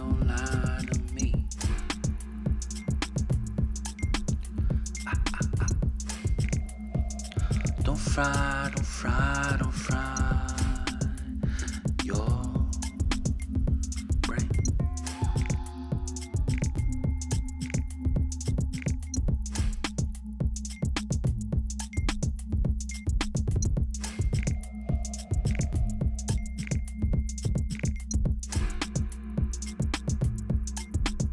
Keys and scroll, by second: 0.2 Down, 2.0 Up, 2.6 Down, 2.9 Down, 3.3 Return, 7.9-8.3 Down, 12.3 Up, 13.5 Return, 18.9 ctrl+g, 21.5-22.5 typing, 22.8 Return, 25.5 t, 29.5-31.3 typing.